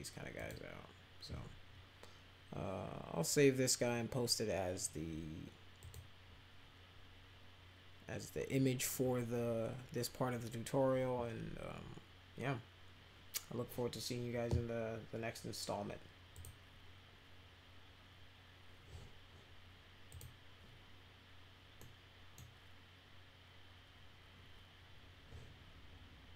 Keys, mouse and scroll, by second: 0.3 click, 5.8 click, 16.3 click, 20.1 click, 21.8 middle click, 26.3 click.